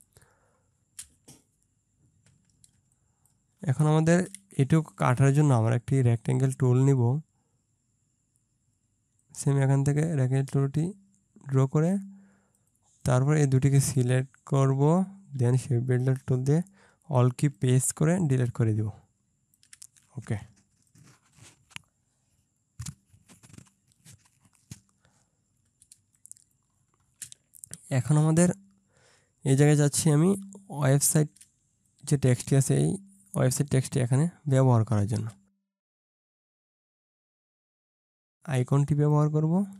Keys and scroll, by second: 2.8 ctrl+space, 26.0 ctrl+space, 30.5 ctrl+space, 34.7 ctrl+space, 37.8 ctrl+space.